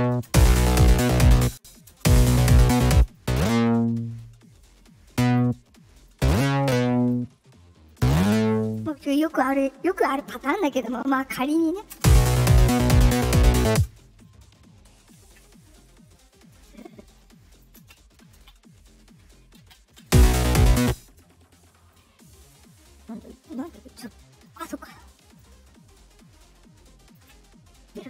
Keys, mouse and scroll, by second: 0.2 space, 1.3 space, 1.8 space, 2.8 space, 3.0-5.3 drag, 6.0-7.0 drag, 7.8 click, 11.9 space, 13.6 space, 16.7 ctrl+click, 19.5 ctrl+z, 19.9 ctrl+b, 19.9 space, 20.7 space, 21.8-23.6 drag, 25.3-27.1 drag.